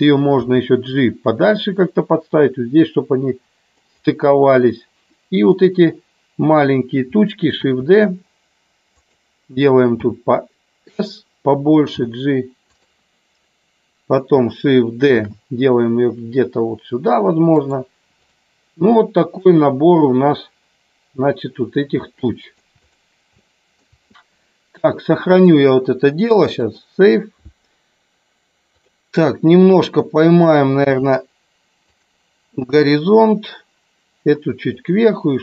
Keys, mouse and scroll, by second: 0.4 g, 3.7 click, 7.5 shift+d, 9.0 click, 9.8 s, 11.8 g, 15.1 shift+d, 17.6 click, 18.1 click, 19.4 click, 22.1 shift+middle click, 22.7 click, 23.3 shift+middle click, 25.4-26.7 drag, 28.7 click, 30.8 r, 32.7-34.7 drag.